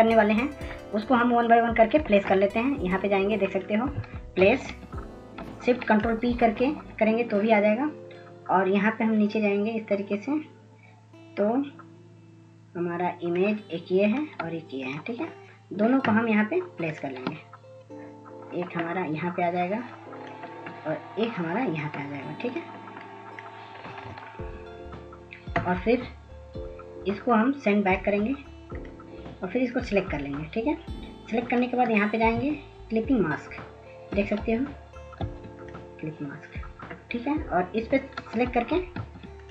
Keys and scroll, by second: 1.1 ctrl+0, 7.5 ctrl+s, 7.8 ctrl+s, 8.0 ctrl+s, 36.3 ctrl+s, 36.8 ctrl+s.